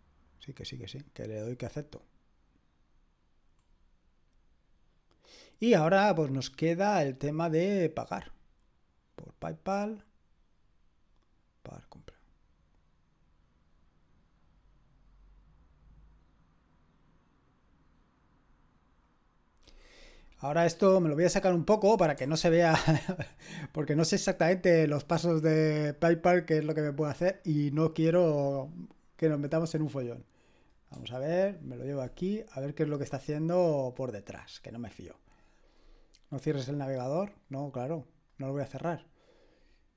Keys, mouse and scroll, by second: 3.4-7.9 scroll down 1, 7.9 click, 9.1-10.7 drag, 11.9 click, 19.1 click, 30.9 shift+super+1, 33.8 click, 36.9-39.1 drag.